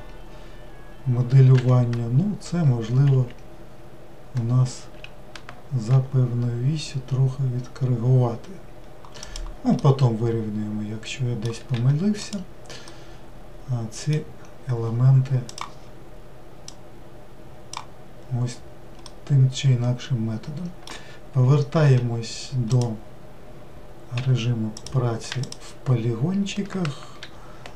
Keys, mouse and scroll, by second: 9.8-15.5 middle drag, 15.5-17.1 drag, 19.1-22.0 middle drag, 22.0 w, 22.7 click, 24.8 click, 25.4 shift+click.